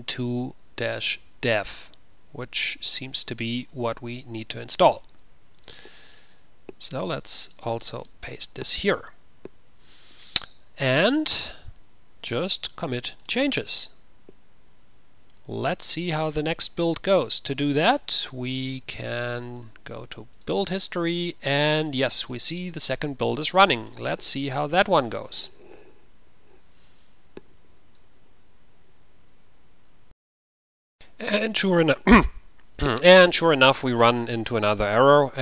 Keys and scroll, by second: 5.3 ctrl+a, 5.3 ctrl+v, 5.3 typing, 5.5 ctrl+c, 8.4 ctrl+v.